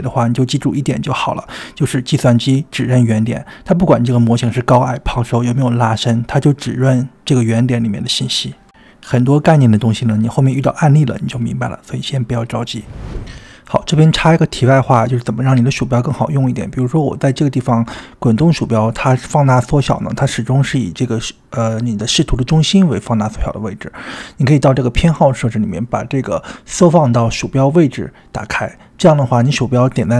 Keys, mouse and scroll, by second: 13.4-14.6 scroll up 1, 14.6 scroll up 2, 15.0 scroll down 1, 15.6 scroll down 3, 16.1 scroll down 1, 17.3 click, 17.8 scroll up 2, 18.7 scroll down 1, 19.2 scroll down 1, 21.4 scroll down 3, 21.5 scroll up 2, 23.3-24.8 drag, 29.6 click.